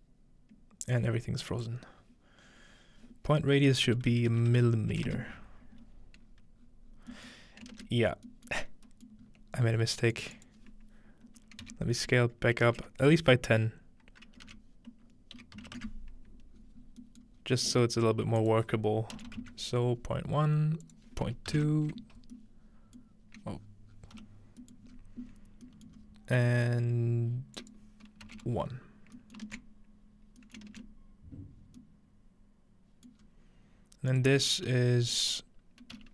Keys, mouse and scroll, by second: 2.8-3.9 drag, 3.9-4.8 typing, 6.3-8.7 scroll down 3, 7.1 middle click, 8.7-9.7 scroll up 4, 10.2 click, 10.3-11.5 scroll up 1, 16.5-17.0 scroll down 1, 17.2 middle click, 17.4 scroll up 1, 18.4 click, 20.8 click, 21.3-22.1 typing, 21.5-22.5 drag, 23.1-23.9 middle drag, 23.6-24.0 scroll down 1, 24.9-28.3 scroll up 3, 25.7 typing, 26.1 middle click, 26.7 middle click, 26.9 middle click, 27.6 click, 28.8-30.2 scroll down 1, 29.5-30.4 ctrl+middle drag, 30.6-31.6 ctrl+middle drag, 30.7 ctrl+space, 31.6-32.8 scroll down 2, 33.1-34.3 middle drag, 33.2 scroll up 2, 34.1-36.0 drag, 34.3-36.0 scroll up 1.